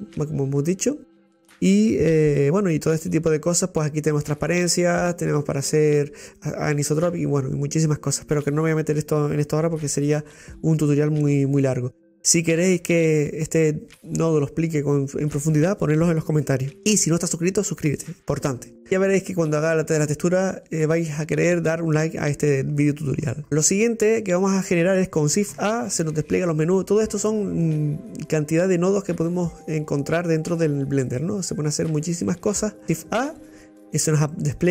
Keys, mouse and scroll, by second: 32.8-34.7 drag.